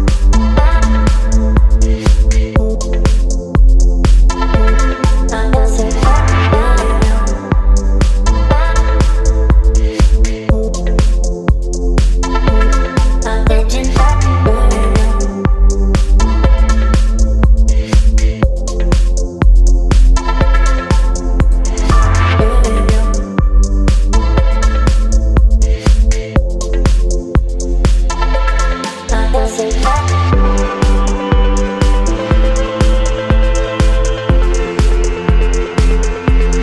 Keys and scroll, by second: 1.9 space, 10.4 Return, 24.3 space, 27.6 space.